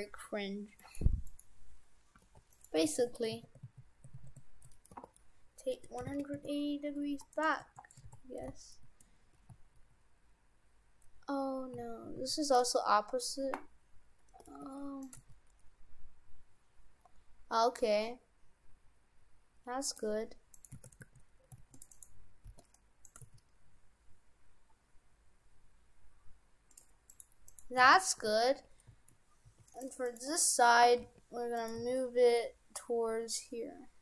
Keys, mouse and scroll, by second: 0.1 Tab, 0.8 right click, 1.3 right click, 2.1 g, 2.9 ctrl+z, 3.4 ctrl+z, 3.7 ctrl+z, 4.2 ctrl+z, 4.9 r, 7.4 right click, 8.1 shift+f, 12.7 right click, 14.5 g, 15.2 g, 20.5 right click, 20.8 shift+f, 21.9 right click, 22.5 g, 23.2 g, 27.1 right click, 27.5 right click, 27.9 shift+f, 28.3 shift+f, 30.1 right click, 31.0 g, 31.8 g.